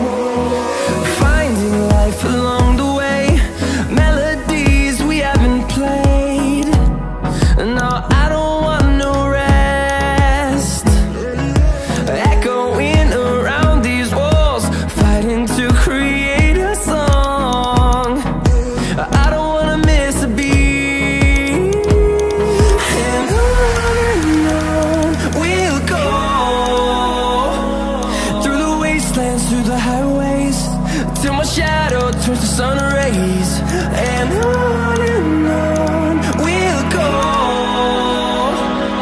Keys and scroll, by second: 38.5 ctrl+d.